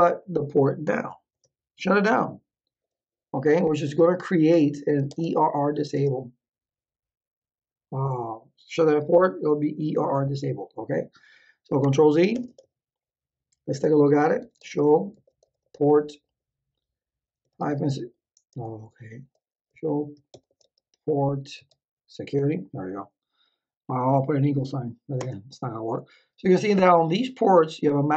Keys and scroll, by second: 0.0-0.3 typing, 0.8 Return, 3.3-6.0 typing, 11.8 ctrl+z, 12.3 Return, 14.1-16.1 typing, 17.4 =, 17.6 Tab, 18.5 BackSpace, 19.7 o, 19.9 p, 20.3 BackSpace, 20.6 r, 21.5 Tab, 25.1 Return.